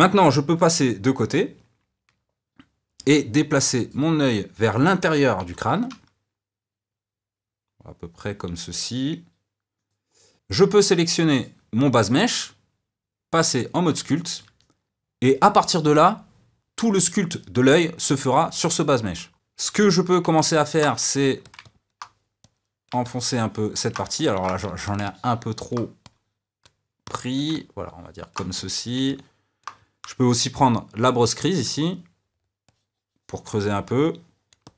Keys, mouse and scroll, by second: 1.6 KP_3, 3.9 click, 5.1 g, 10.2 scroll up 1, 10.3 ctrl+z, 11.3 click, 13.3 click, 14.1-21.0 middle drag, 21.0 f, 21.6 middle click, 22.4 click, 23.0-24.2 middle drag, 24.2 ctrl+z, 24.6 f, 25.0 middle click, 26.0-27.5 drag, 27.5-28.5 middle drag, 28.5 click, 29.0-31.6 middle drag, 31.6-33.6 drag, 33.6-34.7 middle drag.